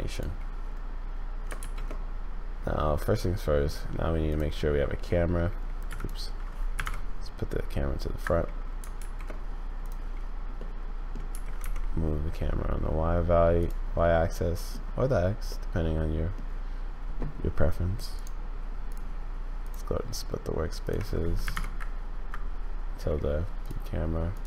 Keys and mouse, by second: 1.6 shift+a, 5.8 x, 8.9 shift+a, 10.7 click, 11.3 g, 14.0 click, 14.3 middle click, 15.6 middle click, 18.2-19.8 drag, 20.8 click, 23.6 click, 24.3 click.